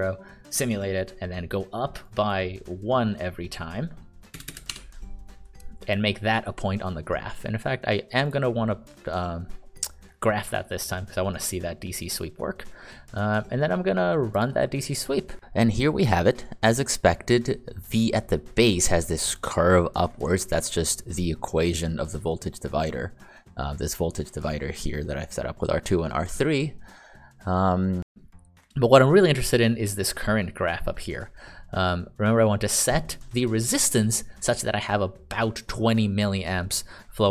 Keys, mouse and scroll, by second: 4.3 BackSpace, 4.4 BackSpace, 4.7 1, 8.2 click, 25.0-27.8 ctrl+d, 28.0 ctrl+d.